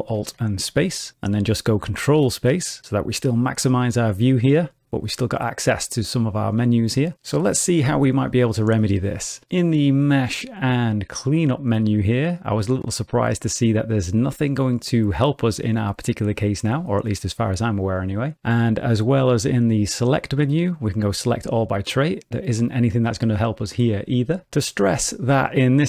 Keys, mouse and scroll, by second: 0.4 ctrl+alt+space, 2.1 ctrl+space, 3.6 shift+middle click, 4.1 middle click, 9.5 click, 19.6 click.